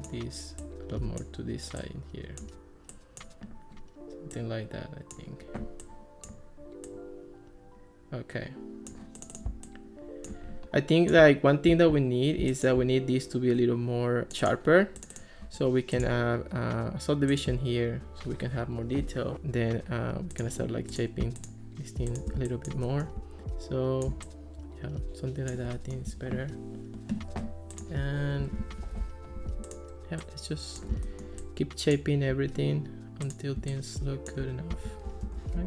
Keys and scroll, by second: 14.3 k, 28.6 alt+r, 35.3 alt+r.